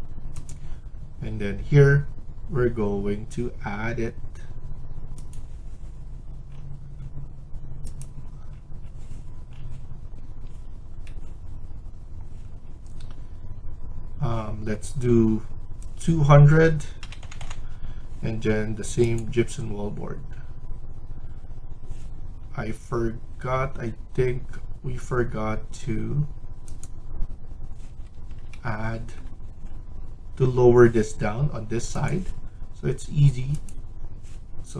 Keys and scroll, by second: 10.4 Escape, 16.7-17.9 typing, 27.8 Escape, 28.0 Escape.